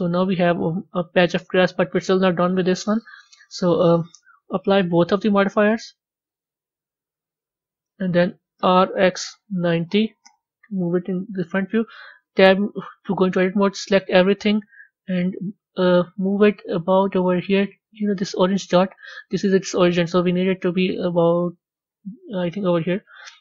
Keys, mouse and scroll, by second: 5.1 click, 5.2-6.3 scroll up 3, 6.3 click, 8.5 r, 10.9 KP_1, 12.2 b, 18.5-20.6 scroll up 3, 22.3 middle click, 22.9 scroll up 1, 23.0-23.4 scroll down 5.